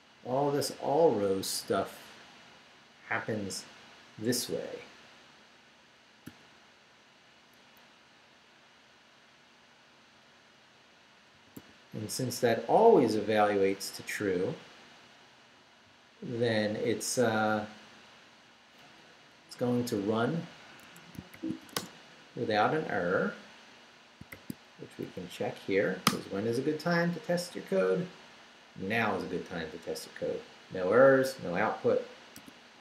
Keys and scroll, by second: 6.3 shift+., 8.8 Down, 10.1 Down, 11.3 d, 12.9 Up, 19.8 d, 20.8 Escape, 21.3 shift+;, 21.6 shift+w, 21.8 Return, 24.3 shift+;, 24.8 shift+Up, 26.1 Return, 32.4 q.